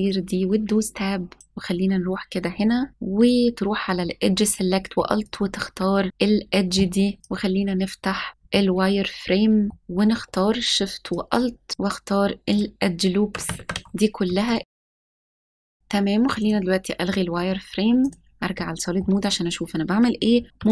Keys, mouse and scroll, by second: 1.4 click, 2.1-2.9 scroll up 2, 2.9 click, 5.2 alt+click, 7.2 click, 8.4-9.7 middle drag, 9.7-10.1 scroll up 3, 11.0 alt+shift+click, 11.7 ctrl+alt+shift+z, 11.7 alt+shift+click, 12.4 alt+shift+click, 13.5 ctrl+z, 14.4 alt+shift+click, 14.6 shift+middle click, 15.0 ctrl+z, 15.2 ctrl+z, 15.2 middle click, 15.4 alt+shift+click, 15.5 ctrl+z, 15.7 alt+shift+click, 15.8-16.2 scroll down 2, 16.3 click, 17.9 s, 18.0 click, 18.5 middle click, 19.2-19.6 scroll up 1, 20.5 s.